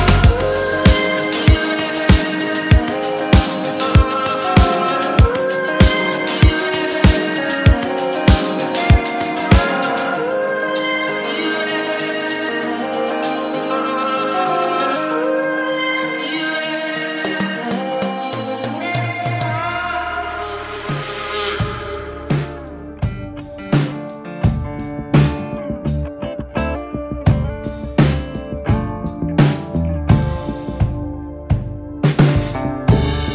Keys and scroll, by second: 0.1 space, 2.0 ctrl+z, 6.8 space, 8.0 ctrl+z, 8.0 space, 9.1 ctrl+z, 18.0 x, 19.7 space, 20.7 x, 21.6 space, 22.0 x, 22.5 ctrl+z, 23.4 space, 23.8 ctrl+z, 24.8 space, 32.0 ctrl+z.